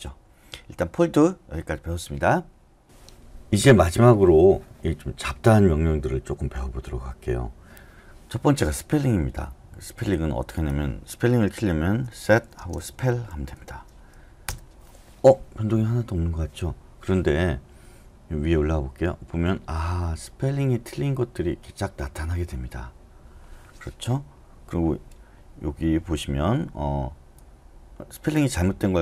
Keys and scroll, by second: 11.9-14.0 typing, 14.4 Return.